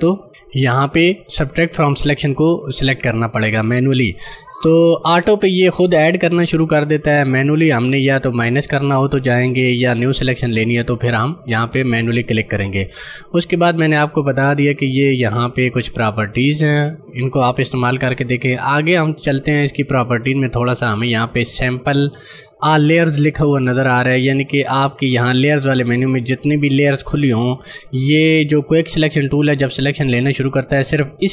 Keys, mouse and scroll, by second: 16.0 click.